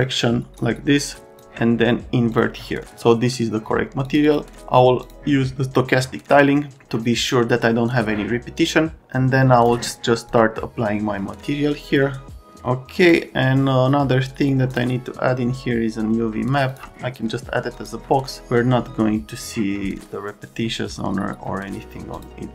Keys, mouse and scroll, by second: 0.0 click, 1.3 click, 2.3 click, 4.1 click, 4.3 click, 5.0 click, 7.9 click, 13.0 middle click, 14.7 middle click, 16.7 middle click, 17.8 middle click, 22.2 click.